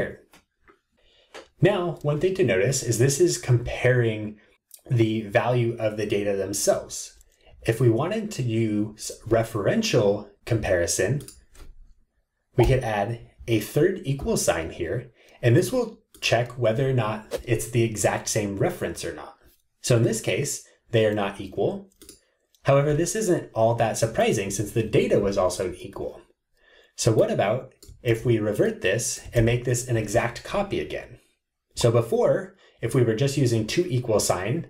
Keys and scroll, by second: 28.0 super+c.